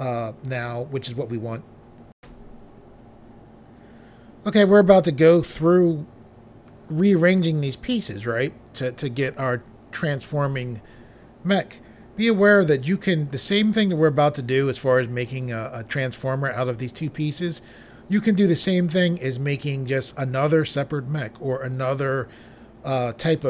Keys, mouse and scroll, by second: 2.2 Pause.